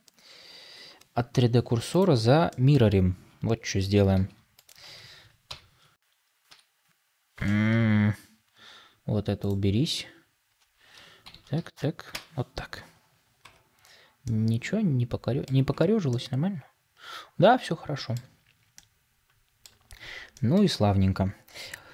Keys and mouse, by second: 1.2 ., 2.4 middle click, 4.0 shift+d, 5.4 ctrl+m, 11.1 ctrl+m, 13.3 Tab, 14.1-15.4 middle drag, 15.6 Tab, 16.0 middle click, 16.1 click, 16.2-18.1 middle drag, 18.6 click, 20.2 shift+click.